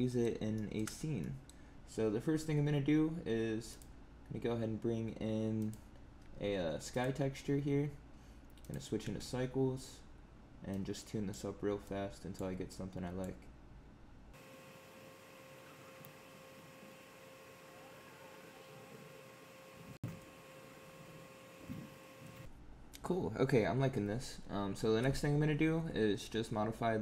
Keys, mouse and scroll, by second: 0.5 shift+middle click, 0.8 scroll down 3, 1.1 middle click, 3.6 click, 5.5 click, 8.6 click, 9.0 space, 10.6 click, 11.8 click, 12.6 click, 14.3 click, 15.1 click, 15.3 click, 15.5 click, 15.8 middle click, 15.9 middle click, 15.9 scroll up 4, 16.0 shift+middle click, 16.0 middle click, 16.1 middle click, 16.2 scroll down 3, 16.2 middle click, 16.3 middle click, 16.5 click, 16.5 middle click, 16.7 middle click, 16.9 click, 18.4 scroll down 5, 18.4 middle click, 18.7 scroll up 4, 18.8 middle click, 19.0 click, 19.4 middle click, 19.7 scroll down 7, 19.7 middle click, 19.8 middle click, 20.0 scroll up 9, 20.1 middle click, 20.3 click, 20.6 middle click, 20.7 scroll down 2, 20.7 middle click, 20.9 middle click, 21.0 scroll up 1, 21.0 middle click, 21.3 click, 21.4-22.0 middle click, 21.9 middle click.